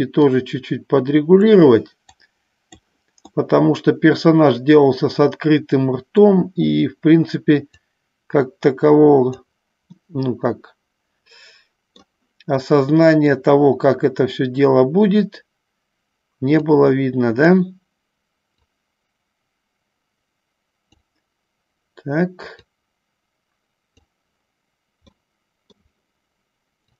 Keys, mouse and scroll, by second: 0.6-1.8 drag, 2.4 click, 3.6-6.4 middle drag, 7.9-9.7 drag, 10.3-12.4 middle drag, 12.9 middle click, 16.9-18.0 drag, 18.8-21.3 drag, 22.8-24.3 drag, 25.5 middle click.